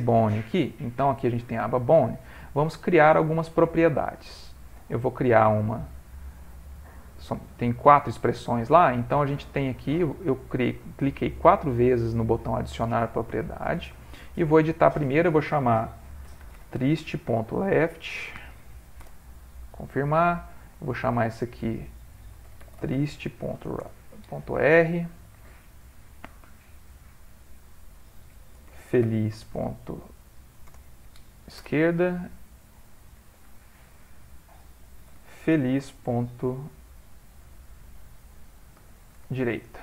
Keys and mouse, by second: 1.4 click, 4.9 click, 5.5 click, 7.3 click, 8.0 middle click, 14.0 click, 20.6 click, 26.9 click, 33.3 click.